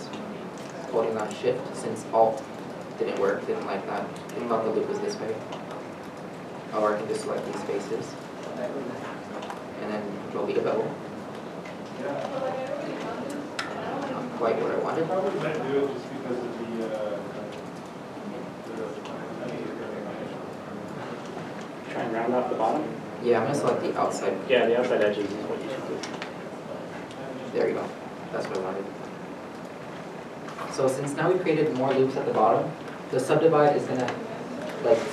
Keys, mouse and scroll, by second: 2.6 alt+click, 3.3 scroll, 3.6-4.1 scroll down 1, 4.2 scroll down 1, 4.2 middle click, 5.8 scroll up 1, 6.6 3, 7.7 shift+click, 10.4 ctrl+b, 14.7 ctrl+b, 15.4 ctrl+z, 16.2 middle click, 17.0 alt+m, 18.3 middle click, 18.7 scroll up 1, 20.0 middle click, 20.3 x, 21.5 2, 22.8 shift+click, 24.1 shift+click, 27.0 ctrl+b.